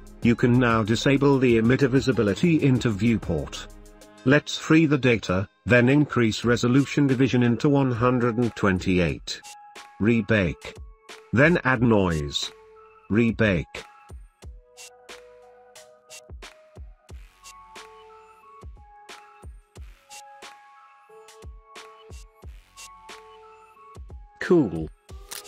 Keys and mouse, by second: 4.5 click, 6.0-7.0 drag, 7.4-9.3 drag, 10.7 click, 13.5-16.8 drag, 17.4-17.8 drag, 18.2 space, 22.3 space, 24.7 click.